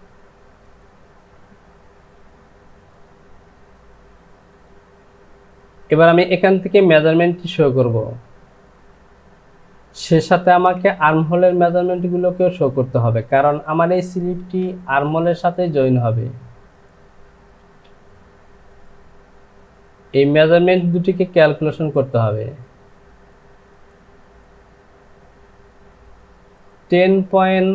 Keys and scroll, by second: 9.1 Delete, 14.5 space.